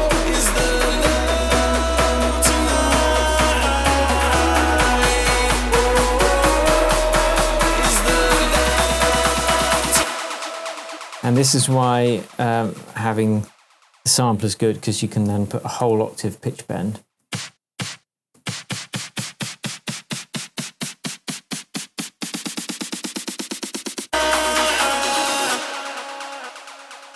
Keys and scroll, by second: 9.9 space, 10.2 shift+Tab, 15.0-15.8 typing, 17.2 space, 25.4 space.